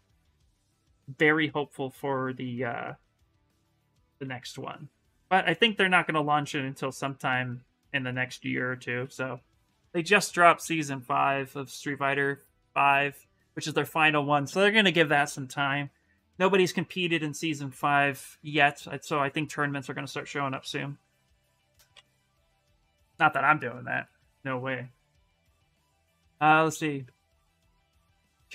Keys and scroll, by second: 1.1 s, 3.5-4.5 typing, 5.9 space.